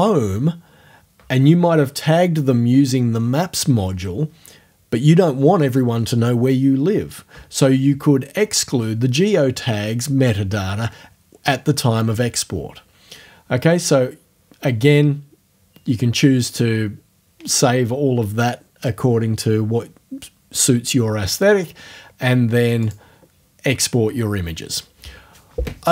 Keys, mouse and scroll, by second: 22.9 click.